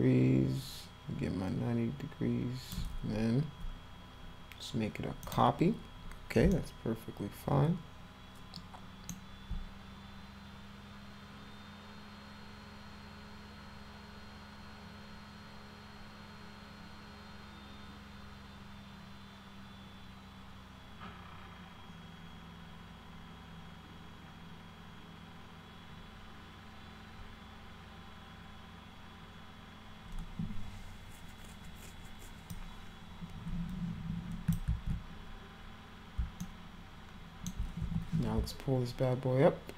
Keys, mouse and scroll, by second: 5.3 click, 6.6-9.1 alt+middle drag, 32.5-34.5 drag, 34.7 ctrl+z, 36.5-37.5 alt+middle drag, 37.8 w.